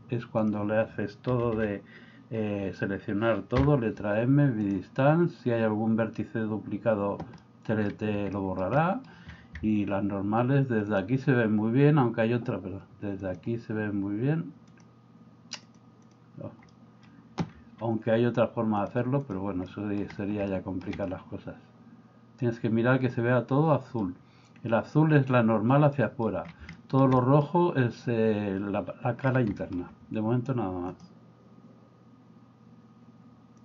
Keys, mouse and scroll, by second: 1.3 a, 1.5 a, 3.7 m, 7.4 middle click, 8.4 shift+middle click, 11.0-12.1 drag, 13.3-16.7 drag, 16.7 middle click, 18.7 click, 19.7 middle click, 20.5 shift+middle click, 21.0-24.1 middle drag, 26.0 middle click, 26.7-27.4 shift+middle drag, 29.6 middle click.